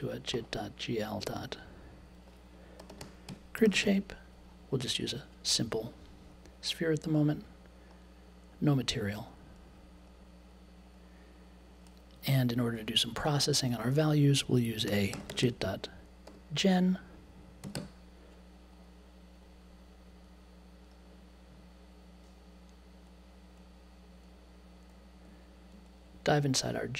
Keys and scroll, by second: 2.5-4.3 typing, 14.6-16.2 typing, 17.3-18.2 typing.